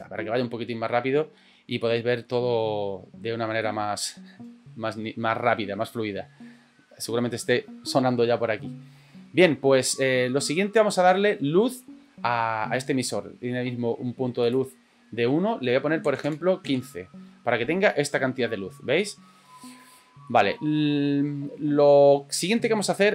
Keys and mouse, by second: 1.9 middle click, 3.6 middle click, 9.8 middle click, 14.4-17.1 drag, 17.7 middle click, 20.3 middle click, 22.8 middle click.